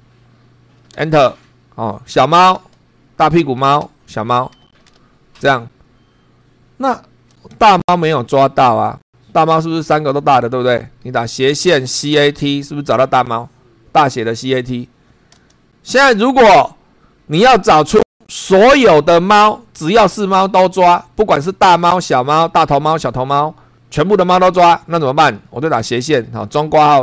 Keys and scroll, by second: 0.9 Return, 2.5 n, 3.8 n, 7.5 Up, 11.3-12.9 typing, 15.3 Return, 25.8 /, 26.1 [, 26.9 shift+c.